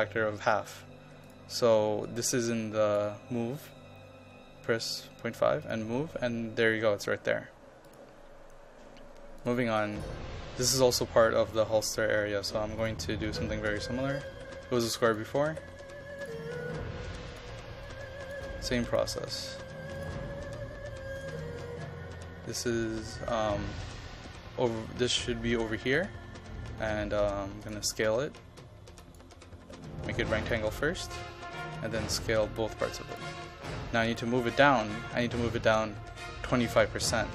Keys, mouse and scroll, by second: 4.7 KP_5, 5.7 click, 14.0-15.7 typing, 15.1 click, 16.3 click, 18.5 KP_5, 19.0 click, 29.3 KP_0, 29.7 KP_Decimal, 29.9 KP_5, 30.5 click, 32.1 KP_0, 32.4 KP_Decimal, 32.5 KP_5, 33.2 click.